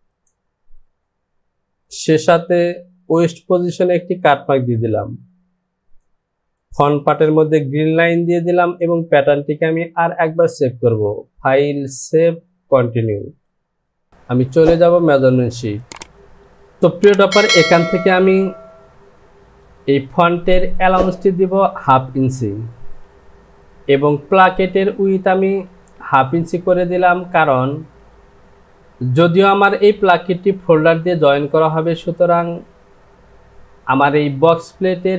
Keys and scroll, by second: 16.0 Return, 25.9 Down, 26.3 Down.